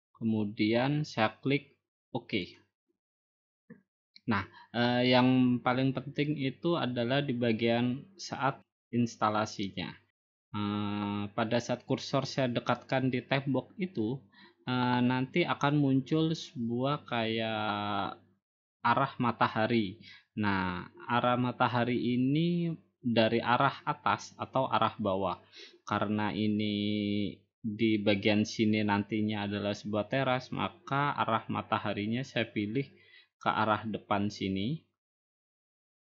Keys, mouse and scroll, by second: 3.4-4.4 drag.